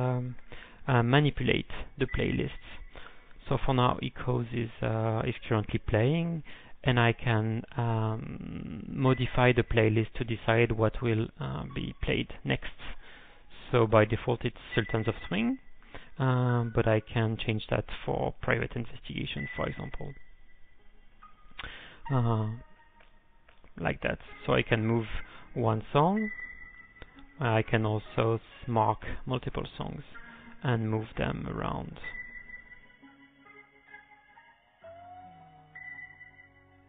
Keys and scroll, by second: 0.0-0.2 typing, 1.2 ctrl+x, 2.0 1, 7.7-8.5 typing, 15.5-16.3 typing, 18.9-19.6 typing, 19.8 ctrl+n, 19.9 ctrl+n, 20.1 ctrl+n, 23.7-24.4 typing, 24.5 alt+Up, 26.8 alt+Up, 27.0 Down, 27.1 Down, 27.3 Down, 27.9 alt+Down, 28.0 alt+Down, 28.6 ctrl+;, 28.6 1, 28.8 alt+Up, 28.9 alt+Up, 30.7 m, 30.7 m, 30.8 m, 31.1 m, 32.4 alt+Up, 33.0 alt+Up, 36.0 ctrl+p, 36.1 ctrl+p, 36.3 ctrl+p, 36.4 ctrl+p.